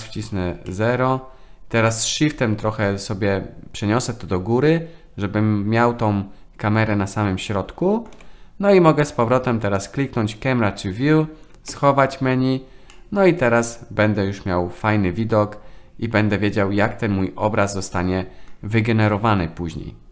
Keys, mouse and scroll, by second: 0.8-8.1 shift+middle drag, 9.8 middle click, 11.7 n, 12.9-18.5 middle drag.